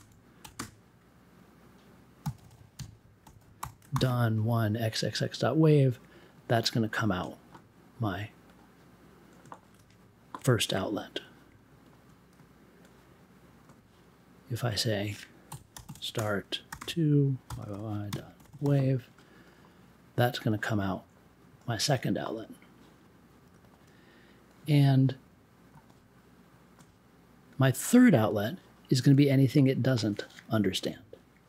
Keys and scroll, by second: 0.4 1, 0.5 space, 2.2 x, 2.7 ., 3.2 w, 3.9 super+j, 15.5-19.0 typing.